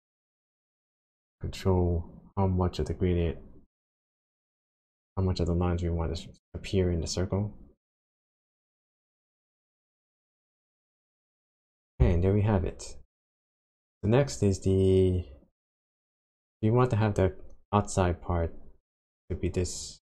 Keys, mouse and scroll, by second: 0.4 click, 13.5 click.